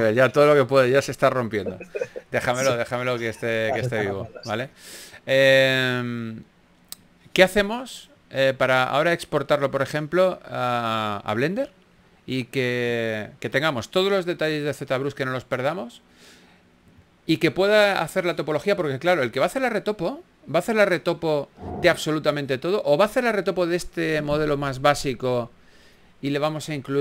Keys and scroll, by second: 0.6 super+z, 1.2 super+z, 5.6 super+z, 10.8-12.3 typing, 14.3 s, 15.7 super+z, 16.2 x, 16.8 shift+f, 21.1 shift+f.